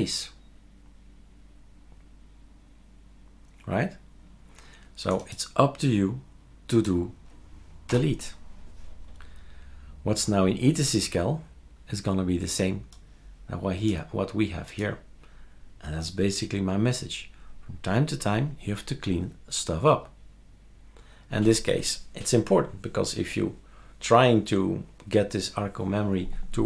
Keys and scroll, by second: 7.9 Delete.